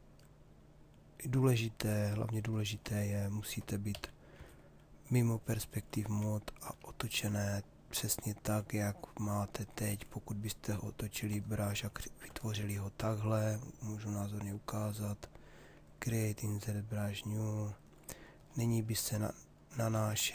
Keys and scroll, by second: 3.5 p, 19.5 ctrl+z.